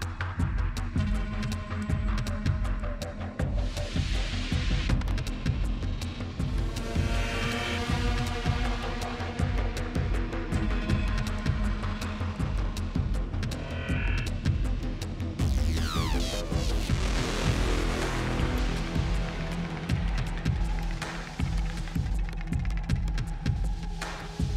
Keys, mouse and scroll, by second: 0.0-0.2 typing, 0.3 Return, 8.3 click, 8.9 click, 12.7-14.0 scroll, 14.0 scroll, 14.2 click, 16.6 click, 17.6 click, 19.8-20.7 typing, 21.1 click, 23.4 click.